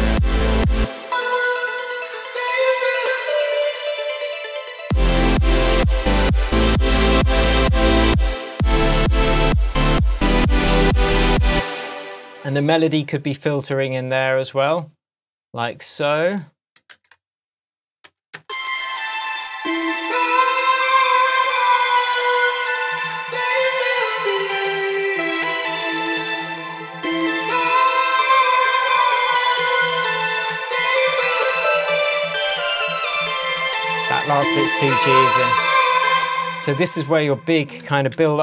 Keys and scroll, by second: 0.7 space, 10.1 super+z, 11.5 super+space, 16.9 super+c, 18.0 super+c, 18.1 super+v, 18.4 super+space, 26.2 super+d, 31.6 super+z, 36.1 space, 38.2 super+t.